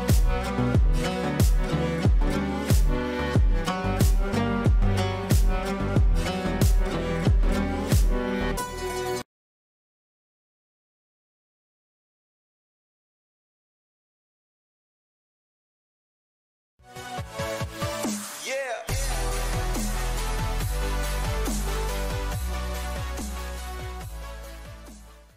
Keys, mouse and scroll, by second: 2.1 shift+F2, 3.8 click.